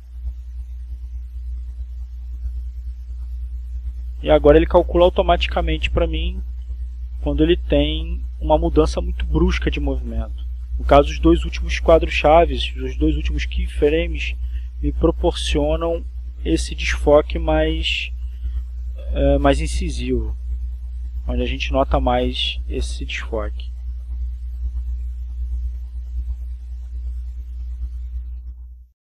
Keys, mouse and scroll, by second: 0.6 click, 2.3-4.3 drag, 4.8-6.0 drag, 6.6 click, 9.6 click, 13.8 click, 16.0 click, 17.3 click, 18.0 click, 18.7 click, 20.0-21.8 drag, 23.0 click, 26.3 click, 27.3 click, 28.6 click.